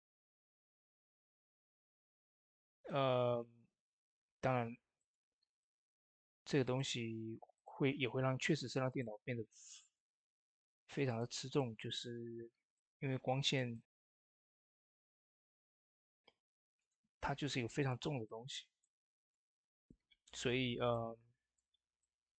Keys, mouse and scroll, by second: 2.6 typing, 2.6 click, 4.8 middle click, 5.4-7.4 drag, 11.4-11.7 typing, 11.4 shift+middle click, 11.7-12.6 scroll up 2, 12.6 click, 13.5 typing, 13.6 middle click, 14.5-22.3 drag, 18.7-19.9 drag, 19.9 typing, 21.7-22.3 drag.